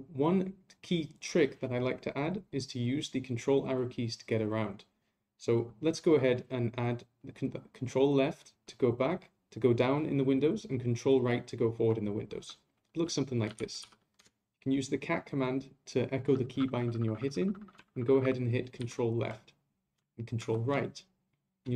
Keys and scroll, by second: 18.8 ctrl+Left, 20.4 ctrl+Right.